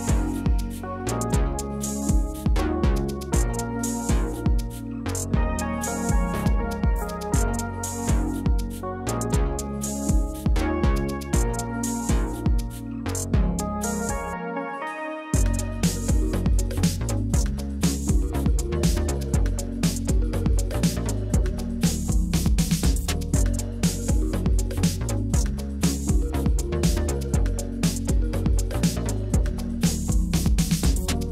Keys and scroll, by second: 0.0 shift+Left, 0.7 Right, 3.8 2, 7.7 ctrl+c, 8.3 ctrl+v, 11.3-12.5 typing, 14.1 ctrl+v, 19.3-23.0 typing, 27.1-28.1 typing.